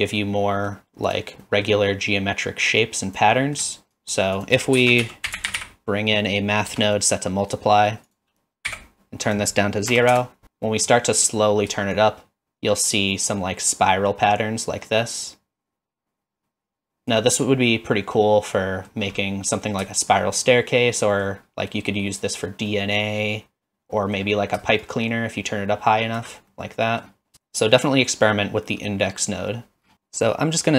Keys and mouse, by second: 0.2-0.7 middle drag, 1.1 click, 1.4 middle click, 3.0 click, 3.5 middle click, 4.1 click, 4.4 click, 4.8 shift+a, 8.2 click, 9.3-10.4 drag, 10.8 middle click, 12.1-17.1 shift+drag, 17.7-18.9 middle drag, 19.2 middle click, 19.9 shift+middle click, 20.4 middle click, 22.7-24.2 middle drag, 24.8-26.2 shift+drag, 26.5-27.0 middle drag, 27.3 click, 29.9-30.7 drag.